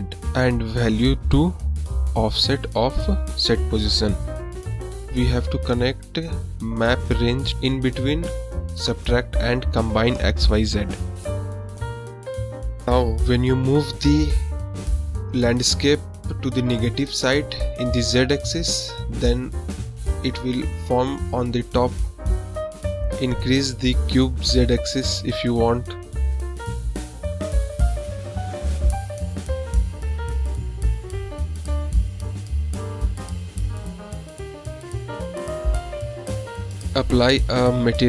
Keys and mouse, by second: 1.7 shift+a, 4.7-5.2 drag, 5.7-6.0 drag, 5.8 middle drag, 5.8 right drag, 6.5 click, 6.5 middle click, 6.5 right click, 7.3-8.3 drag, 8.5-9.6 drag, 12.5-14.2 drag, 14.4-15.3 middle drag, 16.8-18.5 drag, 18.6 click, 19.8-20.5 middle drag, 23.4 click, 24.7 click, 25.8 click, 27.4 click, 28.2-29.3 middle drag, 30.4 click, 31.3-32.4 middle drag, 32.9-34.1 drag, 34.4 click, 34.8-35.6 middle drag, 36.4 click, 37.2 click.